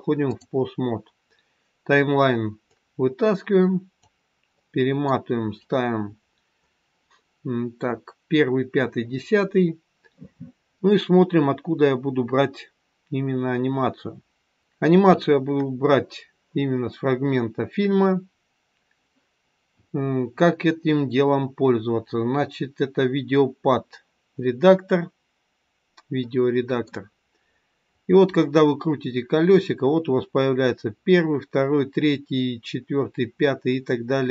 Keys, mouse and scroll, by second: 4.5 middle click, 5.3 scroll up 4, 6.1-7.3 scroll up 5, 7.3-7.6 scroll up 4, 25.5 scroll up 1, 28.1 scroll down 1, 29.0-29.4 scroll down 1.